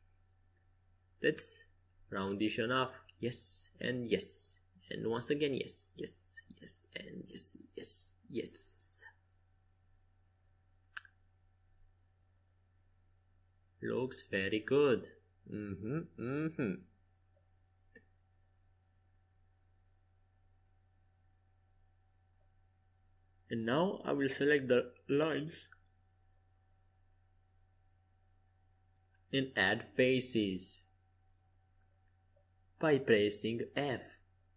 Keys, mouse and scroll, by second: 11.2 a, 11.8 a, 12.4 KP_5, 13.6-15.3 middle drag, 18.9-22.5 drag, 20.4-22.6 right drag, 22.5-24.9 middle drag, 31.1-34.5 middle drag.